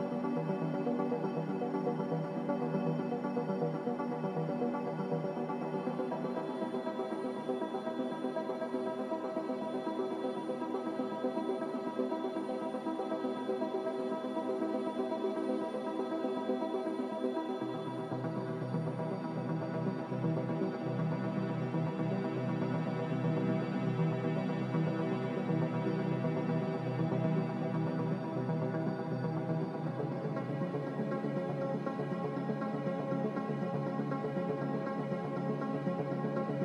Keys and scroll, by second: 4.5-6.0 typing, 7.3-8.0 typing, 10.1 z, 10.7 x, 12.0-12.9 typing, 16.9-17.6 typing, 18.7 a, 24.1 n, 34.5 z.